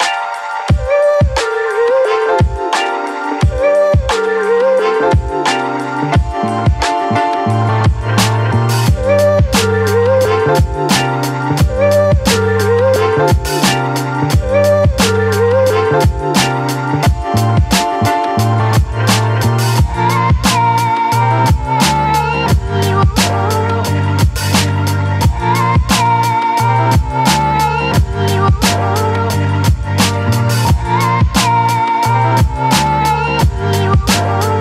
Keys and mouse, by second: 0.4 middle click, 1.8 ctrl+i, 2.3 b, 3.5 b, 4.2 b, 5.5-7.8 drag, 8.2-10.0 middle drag, 8.2 a, 10.5 middle click, 11.1 middle click, 12.7 middle click, 13.2 shift+middle click, 14.1 ctrl+i, 14.6 b, 15.7-19.5 typing, 20.2 click, 21.6 ], 21.9 ], 22.0 middle click, 22.0 ], 22.7-23.9 middle drag, 25.0 a, 26.2 middle click, 26.6 shift+middle click, 27.2 shift+middle click, 28.6 middle click, 28.9 shift+middle click, 29.5 shift+middle click, 30.3 shift+middle click.